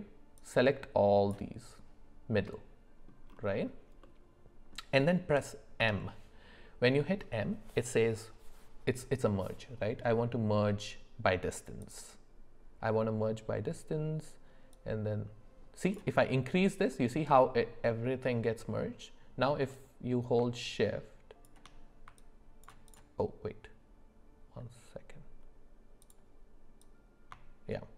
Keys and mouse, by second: 0.5 click, 2.4 middle click, 4.0 middle click, 5.8 m, 14.7-15.9 drag, 19.8-21.5 drag, 22.3-26.0 ctrl+drag, 26.9-27.9 drag.